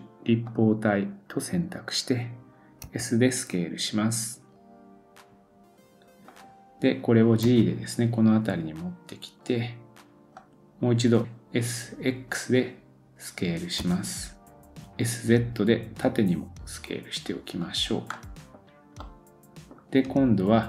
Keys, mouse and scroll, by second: 18.1 middle click, 18.5-19.0 scroll down 2, 19.0 middle click.